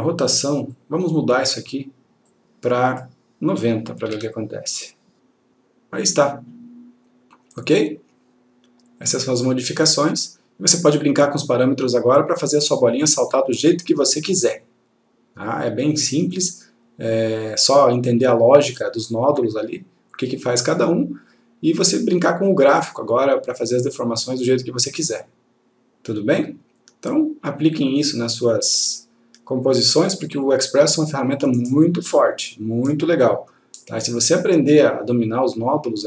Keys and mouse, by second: 0.9 click, 4.2 9, 4.5 click, 31.1 click, 33.5 click.